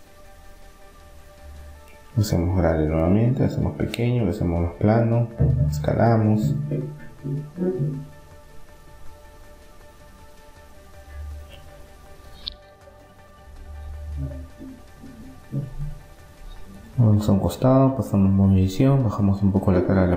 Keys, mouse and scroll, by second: 1.9 s, 7.8-10.2 middle drag, 10.2-12.1 drag, 12.1-14.1 middle drag, 14.1 Tab, 15.1-16.9 middle drag, 16.9-18.8 drag, 17.6-18.8 right drag, 17.9 middle click, 18.8 middle click, 19.4-20.1 drag, 19.4 right click.